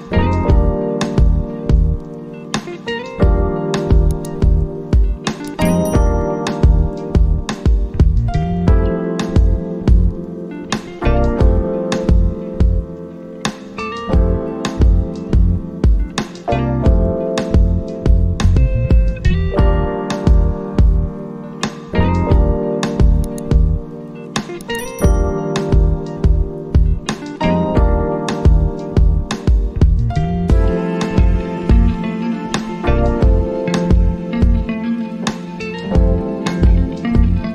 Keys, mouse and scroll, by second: 6.8 alt+Num_Lock, 7.3-12.4 alt+drag, 15.6-20.9 drag, 20.9-26.0 alt+drag, 22.2 alt+click, 22.4 alt+click, 26.5 click, 28.0-36.6 alt+drag, 34.2 alt+click, 34.4 alt+click, 37.1-37.5 drag.